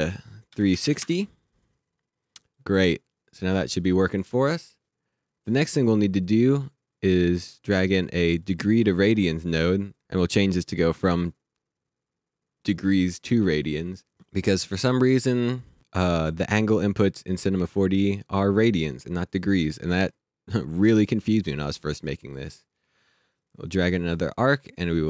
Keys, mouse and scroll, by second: 0.5 KP_3, 0.7 KP_6, 0.8 KP_0, 1.0 KP_Enter, 2.4 click, 8.4 click, 15.8 click, 22.9 click.